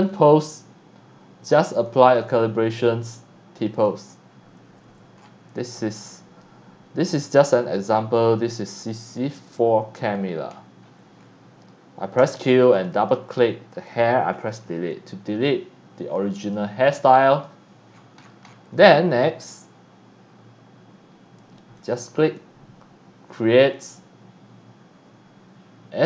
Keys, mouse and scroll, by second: 0.1 click, 1.9 click, 3.6 click, 3.7 click, 5.2 scroll down 1, 5.8 x, 5.9 click, 7.1 click, 7.7 click, 8.1 x, 8.7 click, 8.7 c, 9.5 x, 9.6 click, 10.2-11.2 scroll up 3, 11.2 scroll down 1, 12.7 click, 12.9 click, 14.4 Delete, 16.1 scroll down 1, 16.4 x, 16.5 click, 17.1 c, 17.9-18.6 scroll down 4, 18.7 x, 18.8 click, 21.8 click.